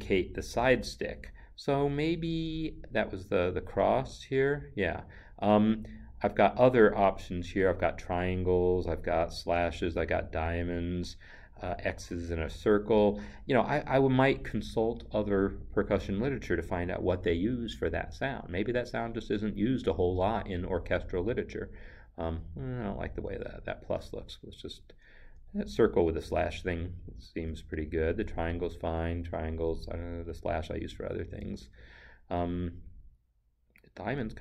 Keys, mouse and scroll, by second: 4.1 click, 21.2 click, 24.8 Up, 25.6 Down, 31.5 Down, 33.6 Up.